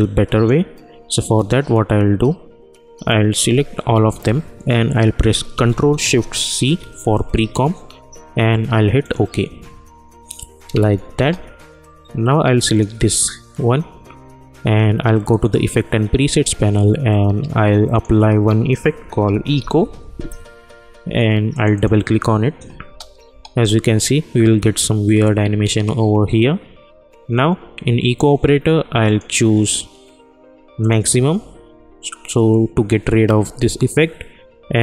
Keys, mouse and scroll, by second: 3.9 ctrl+a, 6.5 ctrl+shift+c, 9.0 click, 10.7 space, 12.6 click, 15.3 click, 17.9 click, 18.7-20.5 typing, 21.5 click, 22.8 space, 29.0 click.